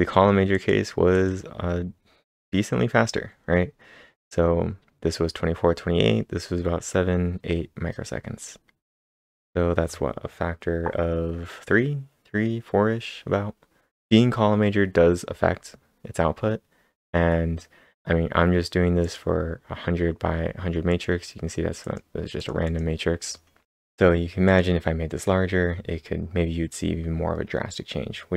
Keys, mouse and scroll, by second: 0.3-1.0 typing, 0.5 click, 1.1 click, 2.5-4.5 scroll up 2, 5.4 scroll down 1, 5.5-7.3 scroll down 1, 7.1-7.8 typing, 9.0 scroll down 1, 13.5 scroll down 1, 13.6 scroll down 4, 13.9 click, 14.3-14.8 scroll up 5, 15.5-16.0 scroll down 5, 16.4-17.5 scroll up 4, 17.5-19.0 scroll down 1, 19.0 click, 20.9 click, 21.8 click, 22.4 click, 22.7 click, 24.5-26.9 click.